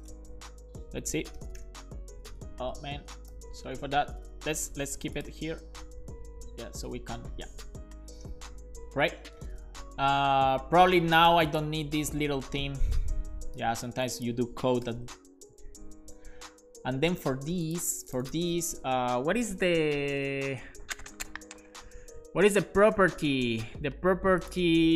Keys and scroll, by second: 0.8 super+s, 1.4 Return, 2.3 BackSpace, 3.4 BackSpace, 3.6 super+s, 15.0 BackSpace, 15.1 super+s.